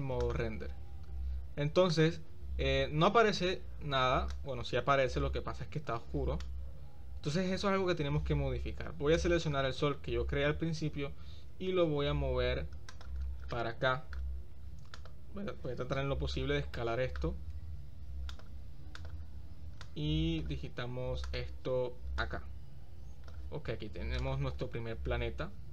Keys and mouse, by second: 4.3-5.9 drag, 6.4-7.3 drag, 9.2 drag, 11.4 shift+d, 13.5-14.2 middle drag, 14.9 click, 16.8 middle click, 17.5 s, 20.0 click, 21.3 click, 22.2-23.3 right drag, 24.2 right click.